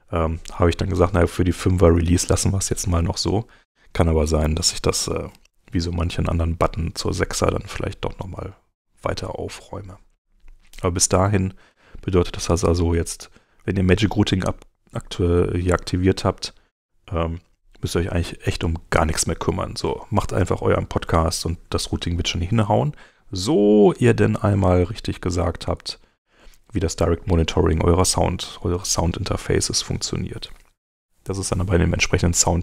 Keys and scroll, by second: 21.6 super+Tab, 24.6 super+Tab.